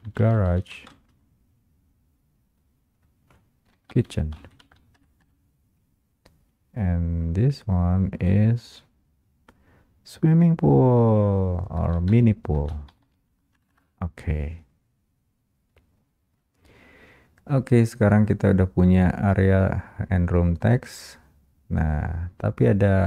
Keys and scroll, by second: 5.1 Return, 12.7 Return, 12.7 space, 13.7 Return.